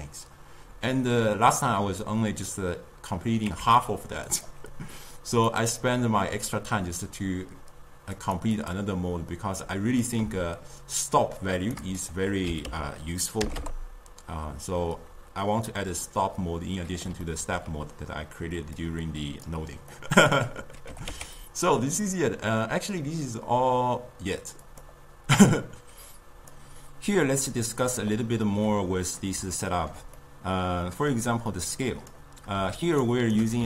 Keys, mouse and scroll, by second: 3.5 Tab, 4.3 click, 5.3-8.4 drag, 8.6 click, 10.1-15.0 drag, 17.3-18.8 ctrl+middle drag, 18.8-20.0 drag, 20.0 middle click, 20.9 g, 28.7-31.8 middle drag, 31.8 click, 33.1 shift+right click.